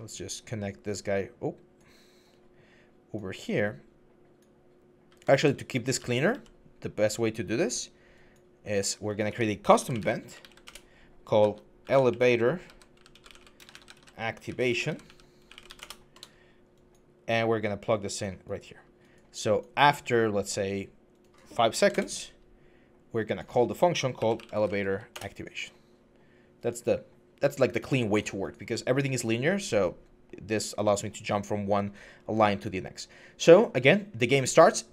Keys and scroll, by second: 5.2 ctrl+z, 5.8 ctrl+z, 6.1 ctrl+z, 9.1 Tab, 9.6-10.2 typing, 10.5 Return, 11.4-15.7 typing, 21.6 typing, 21.7 Return, 24.0-24.6 typing, 24.9 Return.